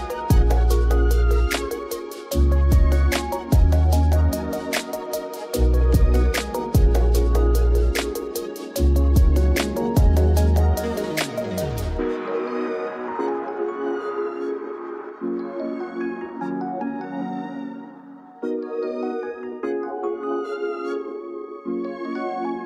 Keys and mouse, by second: 1.3 click, 2.2 click, 5.0 click, 6.6 z, 7.2 z, 8.0 ctrl+s, 8.6 Escape, 10.4 click, 11.6 click, 14.1 ctrl+s, 19.5 click, 20.2 click, 21.7 click.